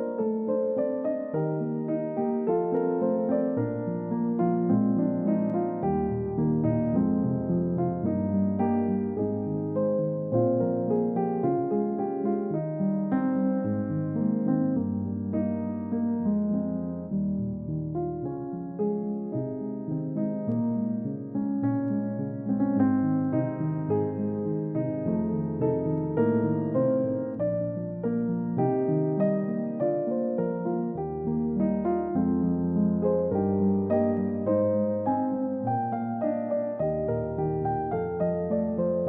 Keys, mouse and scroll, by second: 5.8 middle click, 10.3 shift+click, 15.1-15.4 scroll down 1, 15.6-16.8 scroll up 1, 18.9 typing, 21.3 typing, 21.6 Return, 27.3 middle click, 30.0 space, 31.1-32.3 typing, 34.1-34.5 scroll down 1, 34.5 middle click, 35.4 double click, 35.7-36.1 scroll up 1, 36.1 middle click, 36.2-36.5 scroll up 1.